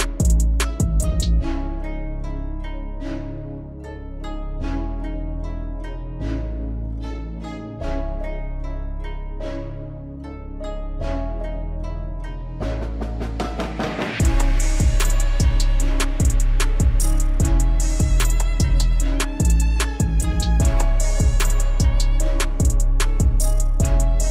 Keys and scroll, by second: 7.0 alt+w, 17.0 F4, 19.0 ctrl+z.